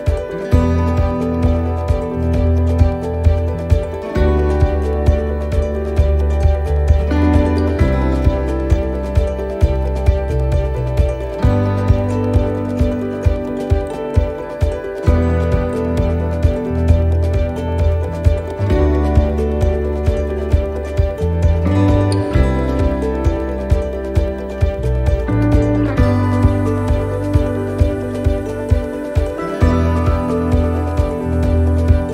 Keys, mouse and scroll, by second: 0.4 middle click, 2.0 f, 2.4 middle click, 3.5 a, 4.7 u, 6.7 middle click, 7.4 shift+middle click, 7.9 middle click, 10.1-10.6 scroll down 4, 10.7 middle click, 11.7 click, 12.8 middle click, 13.2 scroll down 1, 13.7-14.2 scroll up 4, 14.3 shift+middle click, 15.0 middle click, 16.1 shift+middle click, 16.9 scroll up 2, 17.4 middle click, 19.1 middle click, 19.6 middle click, 20.1 shift+middle click, 20.7 middle click, 21.2 scroll down 1, 21.5 shift+middle click, 21.9 scroll down 2, 22.5 shift+middle click, 23.1-23.7 scroll down 2, 26.5 shift+d, 28.1 click, 31.9 middle click.